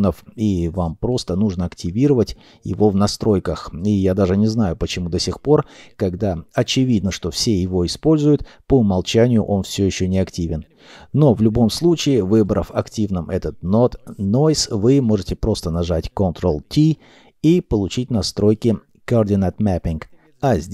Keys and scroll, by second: 13.4 ctrl+t.